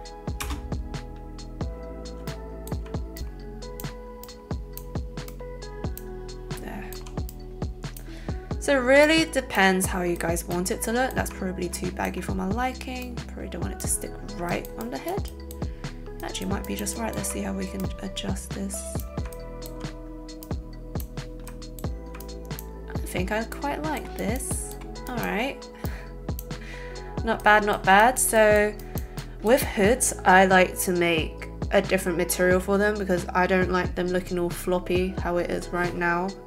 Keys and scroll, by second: 0.4 space.